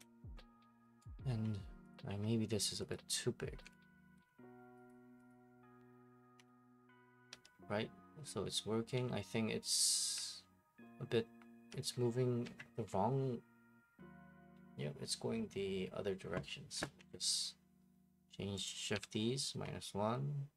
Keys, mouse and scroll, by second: 1.0 right click, 1.3 Escape, 1.5 click, 2.0 scroll, 2.1 1, 2.9 click, 5.3 click, 5.4-9.5 typing, 6.9 click, 10.8 a, 11.4-11.8 a, 17.0 Escape, 18.7 click, 19.5-20.5 scroll down 1.